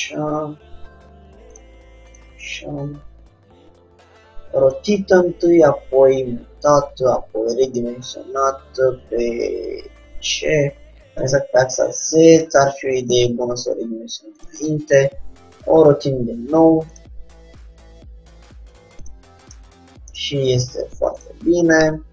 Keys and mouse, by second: 2.6-4.3 drag, 2.7 g, 5.2 g, 7.0-8.8 drag, 7.2 s, 12.7 g, 14.7-16.3 drag, 15.1 r, 17.5 g, 19.7 middle click, 21.4-22.1 drag, 22.0 g.